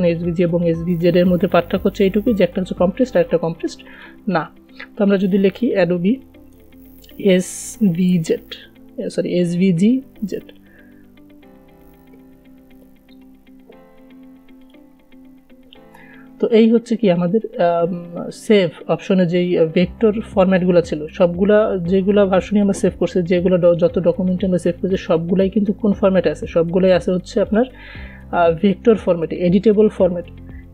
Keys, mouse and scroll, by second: 0.0 click, 4.2 click, 5.6-10.6 typing, 11.6-13.2 typing, 15.0 click, 23.8-27.7 drag.